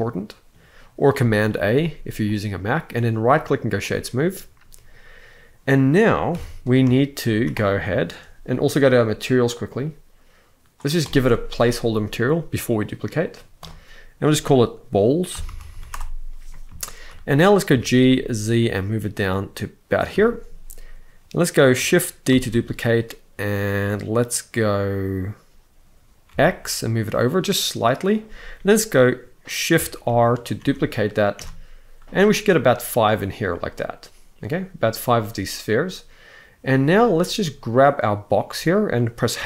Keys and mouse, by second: 3.0-3.5 right drag, 6.1 KP_1, 6.7 shift+middle drag, 7.1 z, 7.7 shift+middle click, 9.0 click, 10.7 click, 13.3-15.6 drag, 15.4 l, 16.5 shift+middle drag, 17.4 g, 17.8 z, 19.9 shift+middle drag, 22.0 shift+d, 26.0 x, 29.8 shift+r, 30.3 shift+r, 31.1 shift+r, 37.5-38.2 drag, 39.1 h.